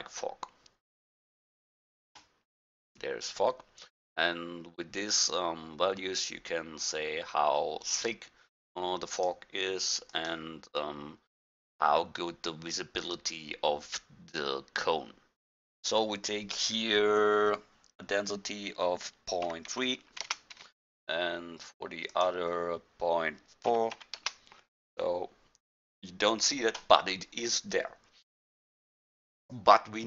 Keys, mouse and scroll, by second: 1.1-1.4 drag, 2.4 click, 9.1-9.5 drag, 15.7-18.1 drag, 22.2-23.9 drag, 29.5-30.0 drag.